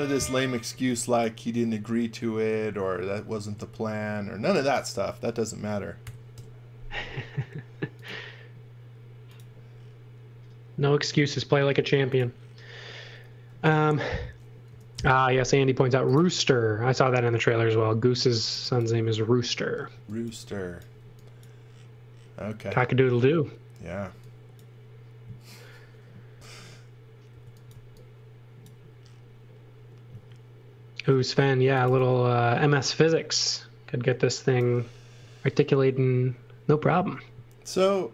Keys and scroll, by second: 0.1 x, 0.7 v, 3.3 a, 6.0 6, 6.3 Return, 13.6-15.4 typing, 19.9 x, 20.2 v, 20.8 x, 24.0 x, 27.4 x, 27.7 v, 30.2 space, 31.4-32.4 typing.